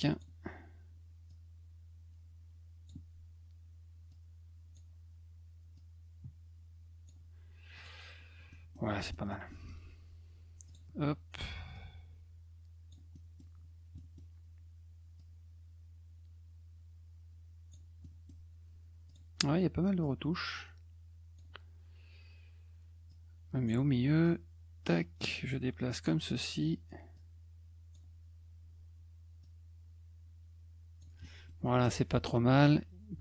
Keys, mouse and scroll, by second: 1.3-2.9 drag, 4.1 click, 5.7-7.0 drag, 7.7 click, 8.5 middle click, 9.1 middle click, 9.5 middle click, 10.7 click, 11.7-12.9 drag, 13.1 middle click, 13.9 middle click, 15.2-17.7 drag, 18.0 middle click, 19.1 click, 20.0-21.4 drag, 23.1 click, 24.2-26.0 drag, 27.1-27.9 drag, 29.4 click, 31.2 middle click, 31.6 middle click.